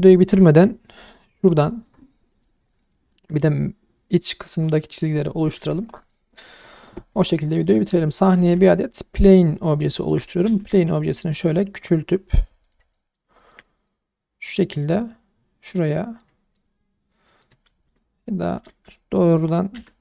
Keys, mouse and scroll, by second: 1.8-2.4 middle drag, 2.7-3.2 alt+middle drag, 5.6-6.3 scroll up 2, 6.1 shift+middle drag, 7.3 shift+middle click, 7.7 click, 7.9-8.6 scroll down 3, 8.3 shift+a, 9.6 scroll up 1, 9.9 shift+middle click, 10.4 s, 10.7 x, 12.6 click, 12.9 middle drag, 13.4 shift+middle drag, 13.6 middle drag, 14.8 click, 16.5 scroll down 1, 16.5-17.4 middle drag, 17.7 ctrl+z, 19.7 /.